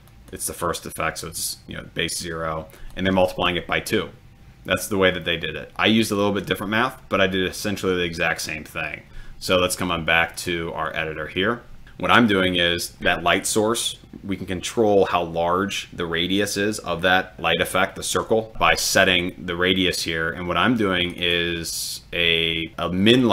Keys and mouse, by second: 0.1 click, 2.8 click, 21.1 click.